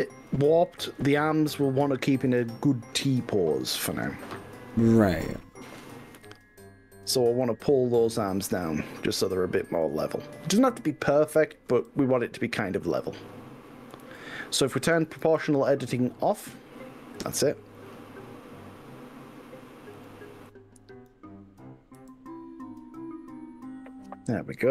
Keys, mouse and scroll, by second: 5.0 middle click, 5.0-5.8 scroll down 4, 5.4 middle click, 6.0 scroll up 2, 7.5-8.6 drag, 11.8 g, 14.0 ctrl+z, 15.0 click, 15.2 ctrl+z, 16.0 click, 17.2 g, 20.0 click, 20.5 click, 22.0 g.